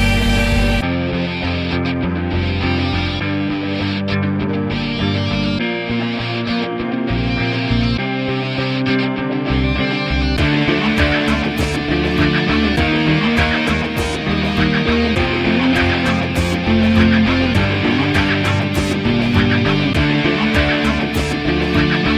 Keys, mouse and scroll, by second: 1.1 alt+middle click, 1.2-2.3 ctrl+alt+drag, 2.3 ctrl+z, 2.4 ctrl+click, 3.0 alt+right click, 3.2 alt+click, 3.8 alt+right click, 3.9 alt+middle click, 4.0-5.8 alt+drag, 5.8 alt+middle click, 6.0 alt+right click, 6.1 alt+click, 6.2 alt+right click, 6.9 p, 7.1 alt+click, 7.3-9.2 alt+middle drag, 9.2 alt+right click, 9.5 alt+click, 9.6 f, 10.0 click, 10.3 f, 10.4-11.7 drag, 11.7 alt+middle click, 11.8 alt+right click, 11.9-13.8 alt+drag, 13.8 alt+middle click, 13.9 alt+click, 14.0 f, 14.3-15.5 drag, 15.5 alt+middle click, 15.6-16.8 alt+drag, 16.8 f, 17.0-18.2 drag, 18.2 alt+middle click, 18.4 f, 18.7 click, 19.1 alt+middle click, 19.3 alt+click, 19.4 f, 19.5 click, 20.2 f, 20.3 click, 20.9 alt+right click, 20.9 alt+middle click, 21.0 alt+click, 21.1 alt+right click, 21.2-22.1 alt+drag.